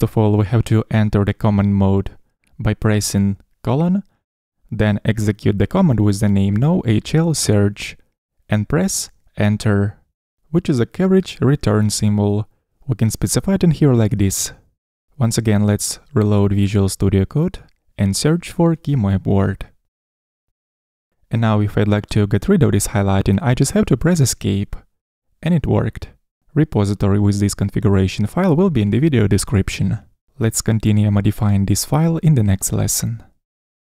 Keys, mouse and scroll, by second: 19.6 /, 25.0 ⟲.